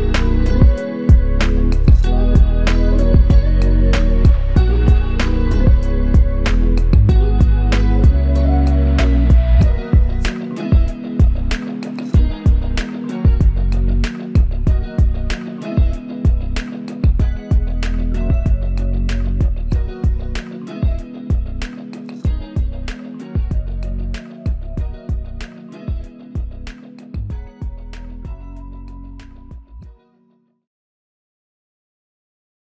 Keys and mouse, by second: 1.2 shift+click, 5.9 alt+shift+click, 6.3 alt+shift+double click, 6.7 ctrl+alt+click, 7.7 typing, 10.4 double click, 20.4 ctrl+alt+click, 21.7 alt+click, 23.6 double click, 28.1 alt+click.